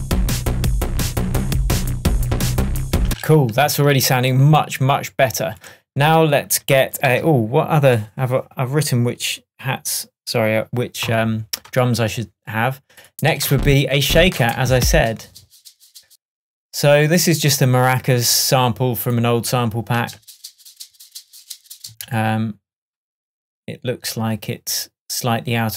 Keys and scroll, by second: 3.1 space, 13.4 Up, 20.1 space, 21.9 space.